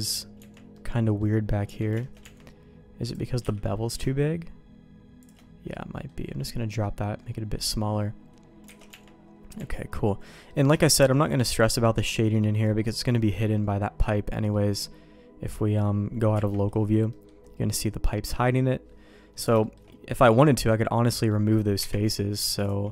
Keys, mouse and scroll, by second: 0.3 Tab, 0.7 middle click, 1.6 Tab, 1.9 shift+middle click, 2.7 Tab, 3.0 click, 3.4 q, 5.7 middle click, 6.8 middle click, 7.5 middle click, 8.7 alt+a, 8.8 Tab, 9.5 Tab, 10.2 middle click, 10.7 shift+middle click, 11.4 middle click, 12.3 middle click, 12.9 middle click, 13.9 middle click, 16.3 KP_Divide, 17.0 middle click, 18.0 middle click, 19.5 shift+middle click, 20.6 middle click, 21.7 KP_Divide, 22.6 click.